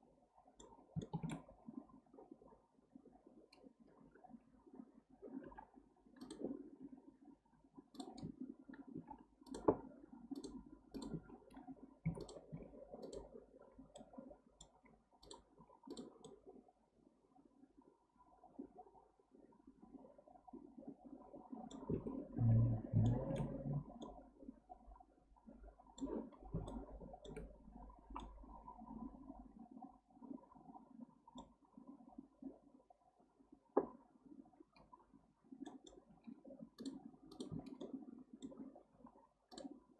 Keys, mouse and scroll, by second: 1.5-4.5 scroll up 1, 12.2 click, 12.5 x, 13.7 scroll down 1, 14.0-15.2 middle drag, 15.2 drag, 15.6 x, 16.2-19.3 middle drag, 22.1-23.1 scroll down 7, 23.1-23.6 shift+middle drag, 23.6-24.0 scroll up 1, 24.0-26.2 middle drag, 26.2-26.7 scroll up 1, 26.7-31.3 shift+middle drag, 35.6-36.1 middle drag, 36.1 k, 37.8-38.9 middle drag, 38.9 k.